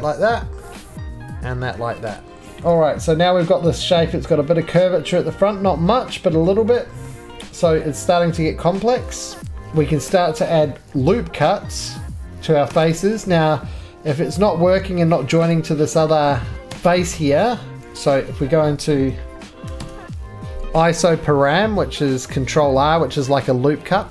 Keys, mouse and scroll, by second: 0.0 right click, 0.6 middle click, 0.7 middle click, 0.8 scroll, 0.9 click, 1.2 click, 1.8 scroll down 2, 1.8 2, 1.8 middle click, 1.9 2, 2.1 click, 2.1 scroll up 1, 2.4 shift+middle click, 2.4 scroll down 4, 2.6 middle click, 2.6-4.6 shift+scroll down 1, 4.6 middle click, 4.9-6.4 shift+scroll down 6, 5.3 shift+middle click, 6.4 middle click, 6.5 scroll down 1, 6.7 shift+middle click, 6.7-8.3 scroll, 7.0 middle click, 8.3 middle click, 8.7-9.4 scroll, 9.4 ctrl+r, 9.4 middle click, 9.4 scroll, 9.4 click, 9.6 middle click, 10.1 middle click, 10.9 ctrl+r, 12.2 Escape, 12.7 Escape, 12.9 click, 14.2 ctrl+r, 15.5 click, 16.2 middle click, 16.3-17.2 typing, 16.5 click, 16.9 click, 17.8 ctrl+r, 17.8 click, 17.8 right click, 17.9-18.3 scroll, 18.4 middle click, 18.7-20.5 typing, 20.5 middle click.